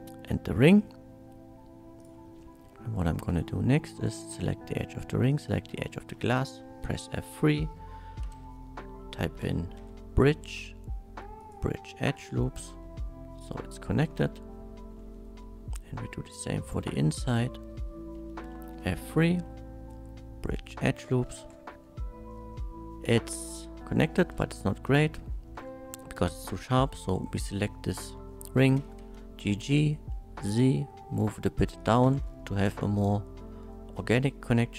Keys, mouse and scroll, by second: 2.0 shift+click, 2.4 shift+middle click, 3.1 2, 3.9 click, 5.3 alt+shift+click, 5.9 alt+shift+middle click, 6.8 F3, 8.2 b, 9.4 r, 9.8 i, 9.9 r, 11.4 click, 12.8-13.8 middle drag, 14.3 middle click, 15.0 shift+middle click, 15.4 shift+middle drag, 16.0 2, 16.3 click, 17.2 click, 18.9 F3, 20.5 click, 21.4 Tab, 21.8 middle click, 22.6-23.0 middle drag, 23.0 alt+2, 23.4 middle click, 24.7 KP_1, 25.9 scroll up 1, 28.9 g, 31.8 shift+click, 32.0 Tab, 32.3 scroll down 1, 32.7-33.8 middle drag, 34.0-34.6 middle drag.